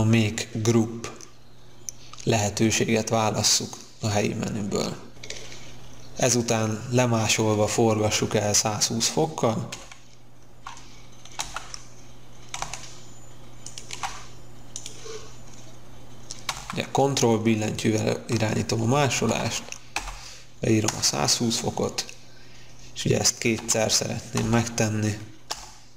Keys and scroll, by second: 11.3 q, 18.8-19.9 typing, 20.8 Return, 23.5 2, 24.3 x, 25.4 Return.